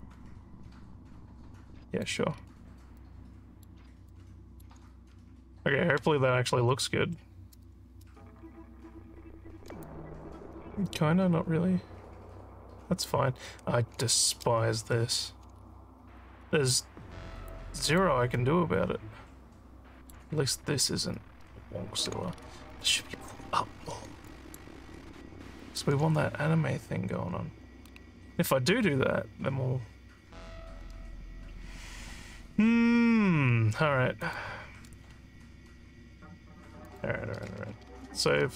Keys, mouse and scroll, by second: 0.0-2.0 alt+drag, 2.4 scroll down 2, 3.0 alt+middle click, 4.1 alt+middle click, 6.1 Tab, 9.9-13.1 alt+drag, 15.6 alt+middle click, 15.6 scroll, 17.5 alt+click, 18.4-20.1 alt+middle drag, 22.3 alt+scroll up 5, 22.8 alt+middle click, 24.3 alt+middle click, 25.0 alt+scroll, 25.6 alt+middle click, 34.3 click, 36.9 click.